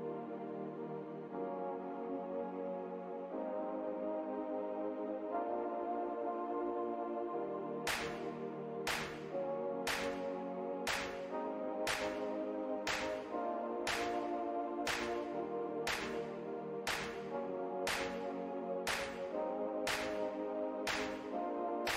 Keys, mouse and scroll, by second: 0.3 shift+v, 1.0 z, 1.8 click, 3.2 click, 4.3 alt+click, 4.7-6.3 typing, 6.4 click, 7.4 alt+scroll down 1, 8.1 click, 9.2 z, 9.7 click, 10.2 alt+click, 10.3 alt+r, 11.1 click, 11.6 alt+click, 11.9 alt+r, 11.9 scroll up 1, 12.3 w, 12.9 click, 13.2 shift+right click, 13.4 shift+r, 13.8 w, 14.0 click, 14.9 shift+right click, 15.3 alt+click, 15.5 scroll down 1, 17.2-17.6 alt+scroll down 1, 17.8 r, 18.7 ctrl+click, 20.0-20.6 alt+scroll up 1, 20.9 right click, 21.4 click, 21.8 alt+scroll.